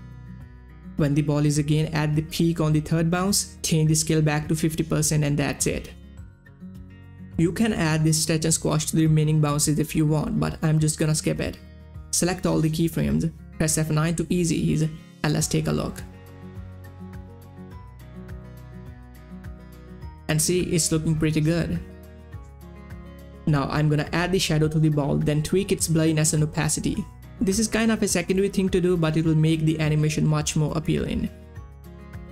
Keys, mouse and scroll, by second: 0.2 Tab, 0.3 typing, 1.6 typing, 2.6 Page_Down, 2.9 click, 3.5-4.3 typing, 3.7 Tab, 4.6 Return, 9.6 Return, 9.7-12.7 drag, 13.6 click, 14.4 F9, 15.0-16.4 drag, 22.3 space, 22.5 click, 28.9-31.1 drag.